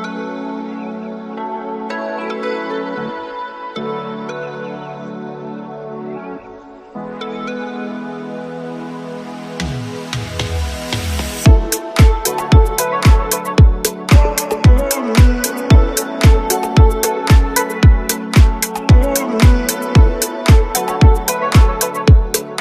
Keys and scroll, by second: 12.8 g, 13.0 y, 17.4 Escape, 18.2 KP_3, 20.3 ctrl+Page_Down, 21.8 g, 22.0 y.